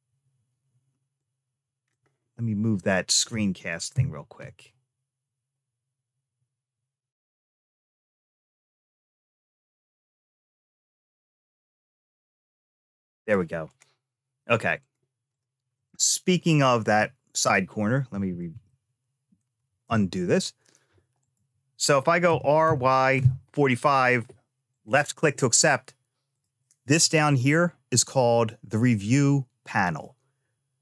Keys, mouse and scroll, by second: 0.9 click, 1.4-3.3 drag, 3.7 n, 9.7-13.1 drag, 13.5 click, 14.6 click, 15.1-16.4 drag, 16.6 ctrl+z, 17.9 ctrl+z, 18.5 ctrl+z, 19.6 ctrl+z, 21.0 click, 22.1 r, 26.1 click, 27.1 click.